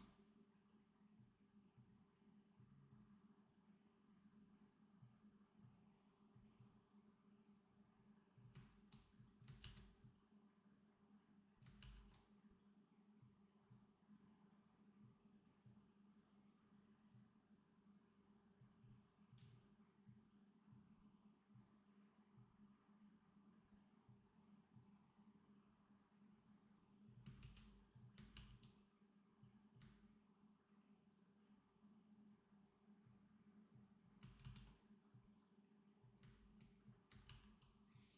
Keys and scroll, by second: 9.5 ctrl+v, 27.3 ctrl+c, 28.2 ctrl+v, 34.3 ctrl+z, 37.1 ctrl+v.